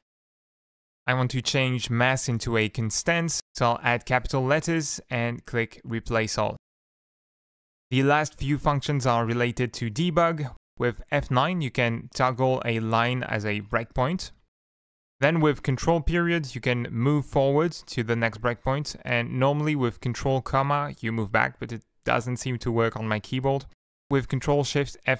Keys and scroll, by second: 0.1 Tab, 2.1 shift+Tab, 11.3 F9, 12.5 Up, 13.4 Up, 13.4 F9, 13.8 F9, 14.3 F9, 14.6 F9, 15.9 ctrl+., 16.3 ctrl+., 16.9 ctrl+., 17.3 ctrl+., 18.8 ctrl+,, 22.6 ctrl+,.